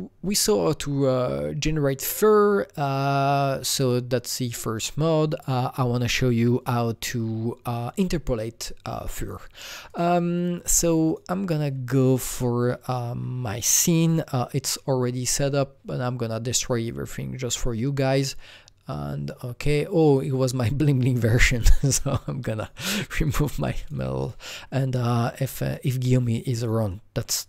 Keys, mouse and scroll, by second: 9.9 click, 11.1 click, 11.8-12.9 scroll down 1, 12.9 click, 15.2 click, 17.5 scroll down 1, 20.0 click, 22.6 click, 22.8 Delete, 23.2 click, 23.4 Delete, 23.8 click, 23.9 Delete, 24.2 click, 25.4-27.4 drag.